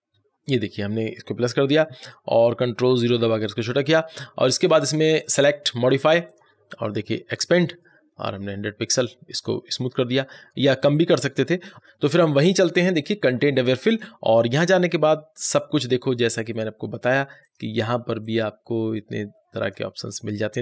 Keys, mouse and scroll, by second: 3.0 ctrl+0, 5.0 click, 12.8 click, 12.9 click, 17.3-20.6 drag.